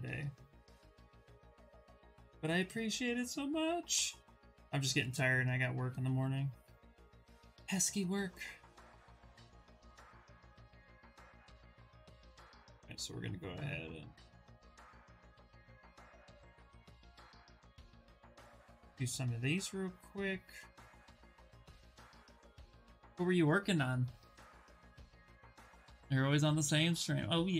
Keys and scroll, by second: 4.6 q, 6.6 shift+f, 9.3 w, 10.5 ctrl+w.